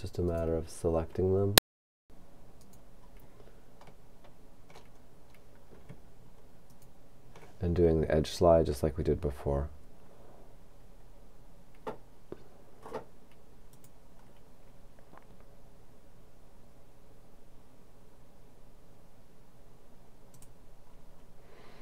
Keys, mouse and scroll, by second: 0.3 right click, 2.7 right click, 4.0 middle click, 5.0-5.7 scroll up 1, 5.7-6.0 scroll up 1, 6.7 shift+right click, 13.7 click, 20.4 click.